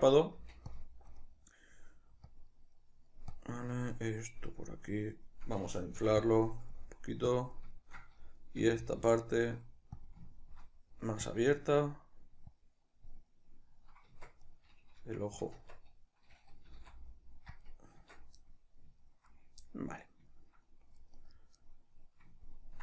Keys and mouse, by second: 0.3 f, 0.8 shift+click, 1.0-2.3 shift+middle drag, 2.3 click, 2.8 middle click, 3.4 click, 3.8 middle click, 4.6 click, 5.0-6.2 middle drag, 6.2 click, 6.9 middle click, 7.3 click, 7.8-9.0 shift+middle drag, 8.6 g, 9.0-10.3 drag, 10.3-11.3 ctrl+middle drag, 11.3 click, 12.0 middle click, 12.6 click, 13.3-14.5 middle drag, 14.2 Tab, 14.5 right click, 15.6 Tab, 16.7 g, 17.7 click, 18.0 Tab, 18.4-21.2 middle drag, 21.2 right click, 21.6-22.8 middle drag.